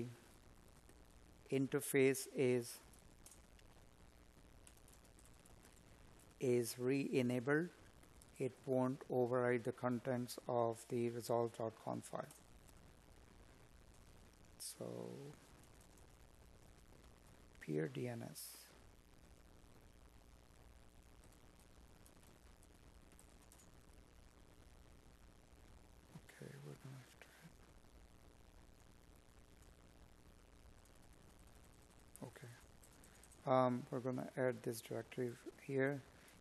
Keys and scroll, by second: 0.4 space, 1.7 Tab, 3.8 Tab, 24.1 Up, 35.6 Escape.